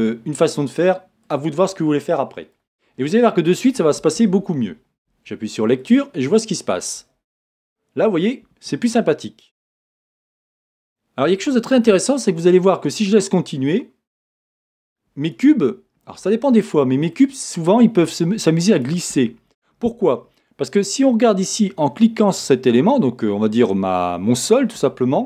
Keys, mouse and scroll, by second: 1.3 click, 1.7-3.8 middle drag, 2.8-3.2 scroll down 2, 3.7 scroll up 2, 5.8 click, 9.5 click, 10.2-12.3 middle drag, 12.3-15.1 drag, 15.3-16.4 drag, 16.6-18.7 middle drag, 17.2-18.7 scroll up 2, 18.7 click, 21.7-25.1 scroll down 2.